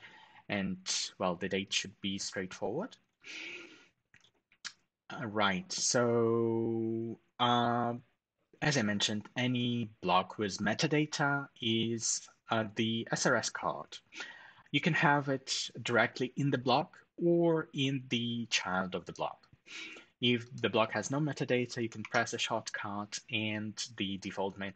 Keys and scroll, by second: 21.7 ctrl+alt+shift+super+#.